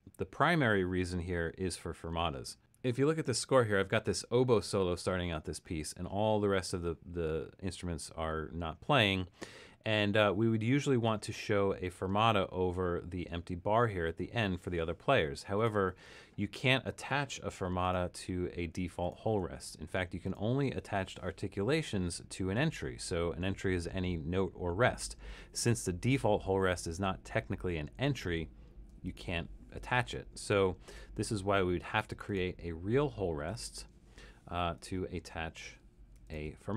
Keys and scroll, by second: 17.7-20.0 typing, 28.9 f, 33.5 7, 36.2 f.